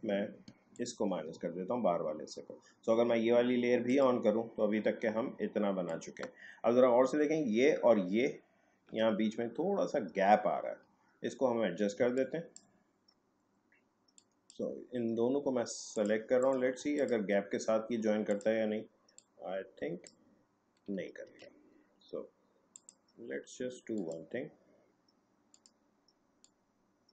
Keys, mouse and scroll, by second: 0.7 alt+click, 3.9 click, 5.9 ctrl+click, 9.5 alt+scroll up 1, 10.6-11.2 alt+scroll down 1, 11.2-11.7 alt+scroll up 1, 12.0 space, 12.1 click, 12.5 space, 14.1-21.3 drag, 21.3 ctrl+z, 22.7-27.1 drag.